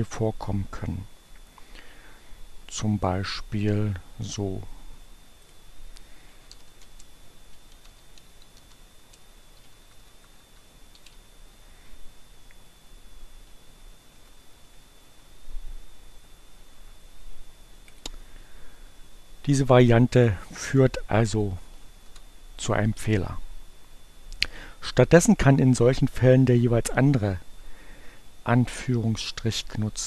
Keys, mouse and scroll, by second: 5.0 click, 6.1-10.4 typing, 9.6 shift+Right, 11.8 space, 14.0 Left, 14.2 shift+1, 14.6 shift+Delete, 17.9 click, 19.8 click, 21.7 Up, 22.0 Return.